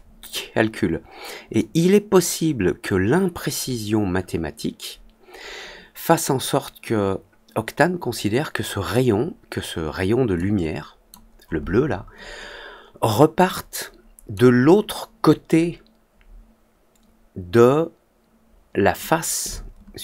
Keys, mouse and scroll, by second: 1.5-8.8 drag, 10.3 click, 13.4 click.